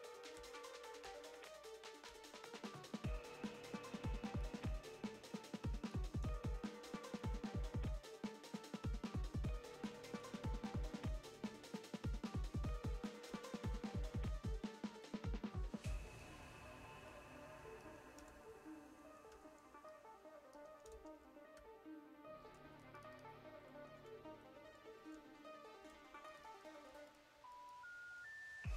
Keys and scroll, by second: 0.4-2.1 typing, 6.2 super+t, 10.7 shift+Left, 11.1 shift+Right, 12.3 Left, 13.3 v, 18.2 Return, 18.3 v, 18.9 space, 19.4 super+t, 20.9-22.6 typing, 24.5 typing, 25.1 Up, 25.8 space, 26.3 alt+super+space, 26.9 v, 27.3 space.